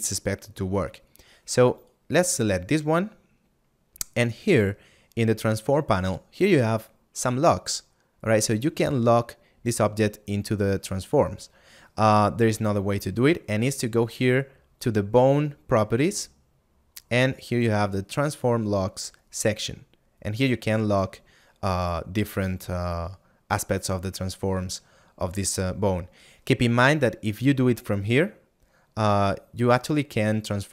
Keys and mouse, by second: 4.1 middle click, 16.5 middle click, 27.3 click, 29.6 click, 30.2 middle click.